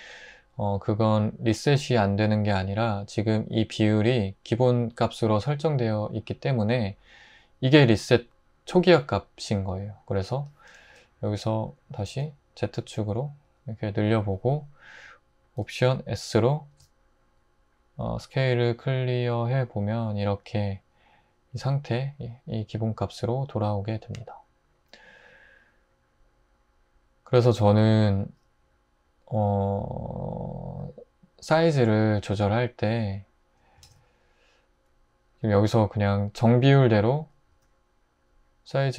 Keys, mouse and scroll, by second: 11.9 s, 12.1 z, 16.7 alt+s, 33.0 x, 33.9 shift+a, 37.5 s.